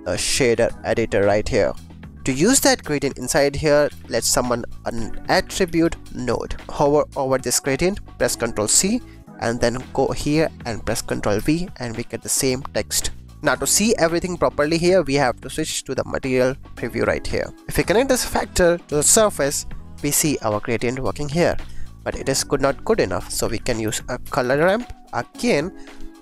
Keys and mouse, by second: 2.0 ctrl+shift+a, 2.9 shift+a, 5.2 a, 5.6 t, 6.5 click, 6.7 ctrl+c, 8.6 ctrl+c, 11.3 ctrl+v, 17.0 click, 17.9-20.0 drag, 21.7 shift+drag, 23.4 shift+a, 25.9 click.